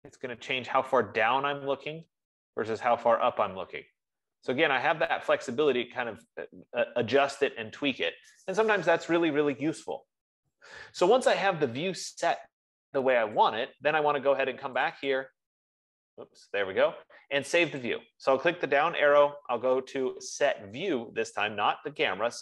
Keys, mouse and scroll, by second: 7.8-13.8 drag, 14.3-22.4 drag.